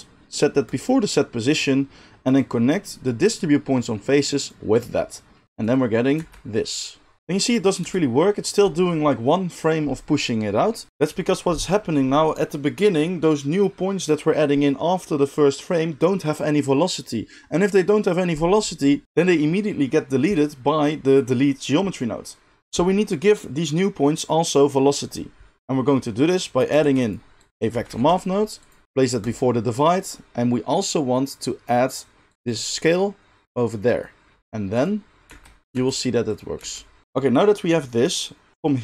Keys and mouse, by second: 0.7-2.3 middle drag, 2.3-29.3 drag, 6.1 space, 7.3 space, 7.8 space, 26.8 shift+a, 29.3-32.2 middle drag, 32.2-35.6 drag, 35.2 space, 35.7 space, 36.5 space.